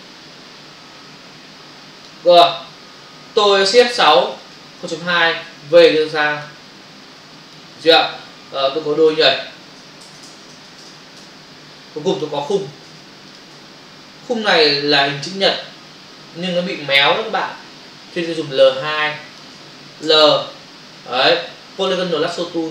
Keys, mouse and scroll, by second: 4.2 shift+F6, 4.9 Return, 5.4 v, 5.9 click, 7.2 click, 9.0 click, 9.1 double click, 10.1-10.8 typing, 11.1 Return, 12.1 click, 13.3 click, 14.0 typing, 19.2 ctrl+click, 20.0 l, 21.0 space, 21.2 ctrl+click.